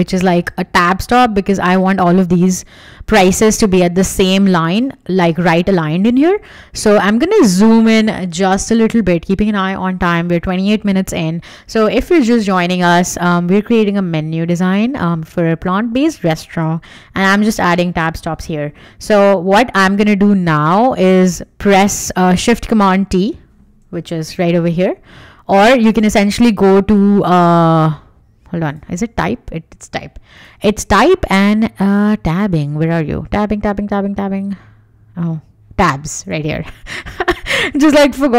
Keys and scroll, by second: 24.2 shift+super+t.